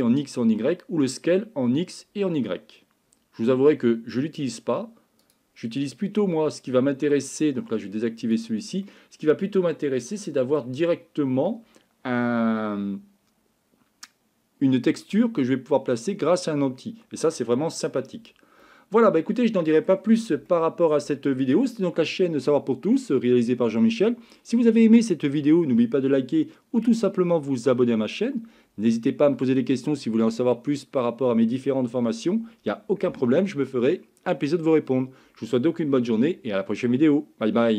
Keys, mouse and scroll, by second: 5.9-7.1 middle drag, 8.9-10.6 middle drag, 18.6-19.9 middle drag, 20.5 shift+middle click.